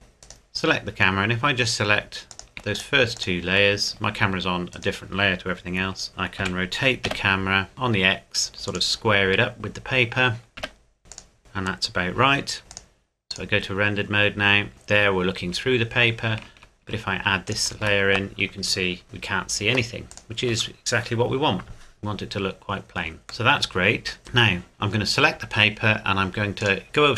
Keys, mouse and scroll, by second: 0.2 right click, 2.3 click, 2.7 shift+click, 4.7 right click, 6.4 r, 7.1 x, 8.7 click, 9.3 g, 10.5 r, 10.6 x, 11.1 click, 11.4-12.6 scroll up 1, 12.7 click, 14.7 shift+middle click, 15.8-16.3 scroll up 1, 17.5 shift+click, 22.6 scroll up 1, 23.2 scroll down 1, 23.5 middle click, 24.2 right click, 26.6 click.